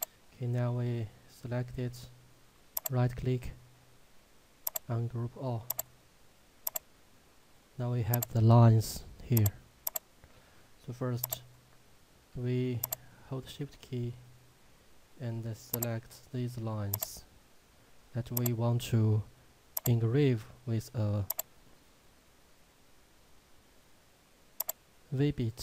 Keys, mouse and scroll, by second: 0.0 click, 2.8 right click, 4.7 click, 12.9 shift+click, 21.8 shift+click.